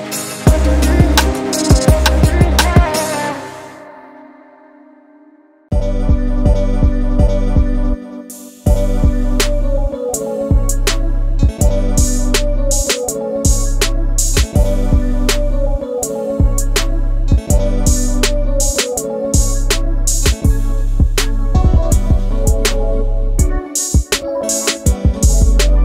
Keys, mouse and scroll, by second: 1.0 alt+click, 1.7 g, 4.3 Tab, 4.7 click, 4.8-5.7 scroll down 8, 5.7 scroll up 6, 6.4 scroll down 2, 6.7 click, 7.1-8.4 middle drag, 8.4 KP_1, 8.5 scroll up 6, 9.3 click, 10.0 Tab, 10.4 shift+middle click, 10.9 1, 11.5 click, 12.3 z, 13.1 click, 13.7 z, 14.1 g, 15.7 Tab, 16.1 scroll down 2, 16.4-17.1 scroll up 1, 17.1 Tab, 18.2 z, 19.0 click, 19.5 z, 19.8 g, 21.8 shift+middle click, 22.2-22.6 scroll up 1, 22.6 z, 23.2-24.3 shift+middle drag, 24.3 click, 24.5 g, 25.7 shift+middle click.